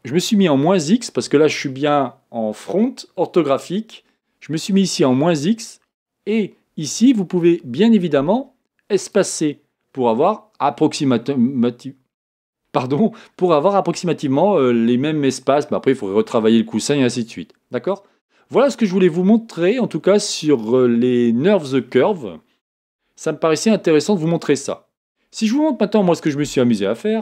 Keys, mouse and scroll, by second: 9.1 click, 18.5-27.2 middle drag.